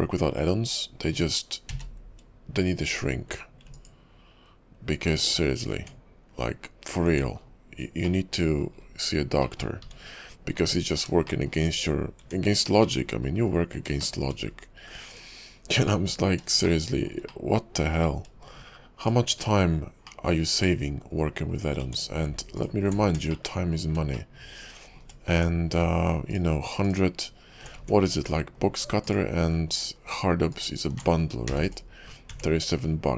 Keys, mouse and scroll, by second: 0.5-1.4 scroll down 2, 1.7 q, 5.6-6.0 scroll down 4, 6.0 Tab, 6.6-7.0 scroll up 3, 7.0 Tab, 7.5-8.2 scroll down 4, 8.2 middle click, 8.9-9.2 scroll down 2, 9.6 shift+middle click, 9.8 `, 10.2 KP_5, 10.7-11.1 scroll down 3, 11.4 shift+middle click, 11.8-12.2 scroll up 4, 12.2 Tab, 13.0 middle click, 13.4 KP_5, 14.2 shift+middle click, 14.5-15.1 scroll up 3, 15.1 click, 16.0 middle click, 16.8 middle click, 17.4 middle click, 18.2 scroll up 3, 19.0 shift+click, 20.2 middle click, 21.8 Tab, 22.5 alt+click, 23.1-23.4 scroll up 4, 23.4 shift+middle click, 23.5 shift+Tab, 24.3 shift+middle click, 25.3 Tab, 26.3 alt+click, 26.9 alt+click, 27.8 Tab, 29.0 alt+click, 30.5 alt+click, 31.5 q, 32.2 scroll down 6, 32.5 Tab, 33.0-33.1 scroll down 4.